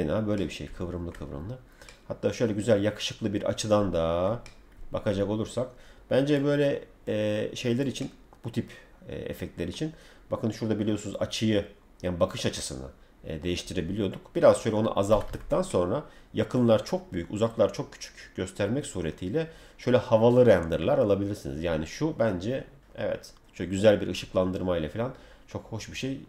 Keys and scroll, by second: 15.1 Escape.